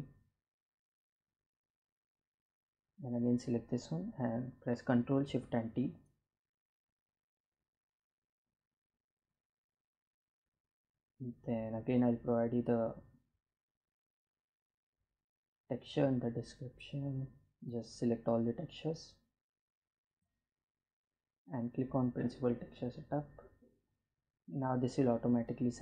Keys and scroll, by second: 4.0 ctrl+shift+t.